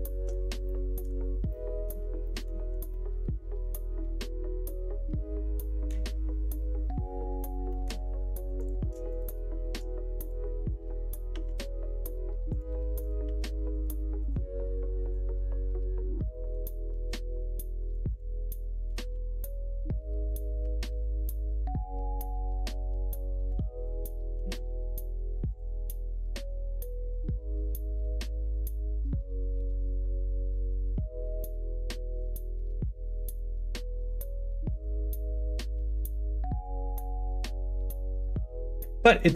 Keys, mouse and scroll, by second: 0.6 shift+middle click, 1.4 middle click, 2.2 middle click, 2.8-5.9 middle drag, 7.6 middle click, 8.5 click, 9.0 shift+click, 11.2 g, 13.0 click, 13.2 g, 14.1 click, 14.2 g, 15.4 middle click, 16.2 scroll up 1, 16.3 middle click, 18.1 click, 18.8 click, 19.0 g, 20.6 2, 20.9 click, 21.4 shift+click, 22.4 f, 23.4 2, 23.7 click, 24.3 x, 25.5 click, 26.0 middle click, 27.4 middle click, 27.8 middle click, 28.3 shift+middle click, 28.9 middle click, 30.3 shift+middle click, 32.1-33.4 drag, 34.7 click, 35.9 r, 36.9 s, 38.4 ctrl+z.